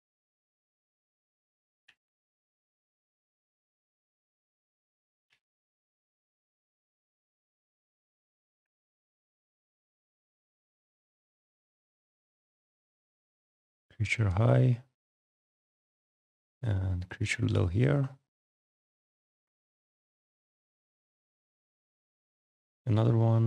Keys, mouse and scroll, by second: 1.6 t, 1.8 o, 2.3 n, 2.5 g, 5.0 u, 5.1 e, 5.5 Return, 6.1 click, 8.4-9.8 typing, 10.5 Return, 12.1 click, 12.8 click, 14.8 click, 16.4 click, 18.3 click, 20.0 click, 22.3 click.